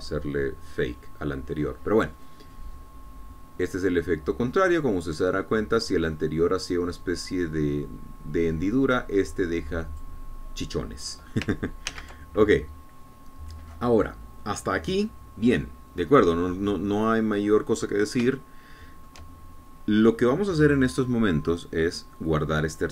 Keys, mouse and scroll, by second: 3.5-11.5 drag, 13.2 ctrl+z, 17.3-17.8 scroll down 2, 17.8 scroll up 2, 19.7 shift+click.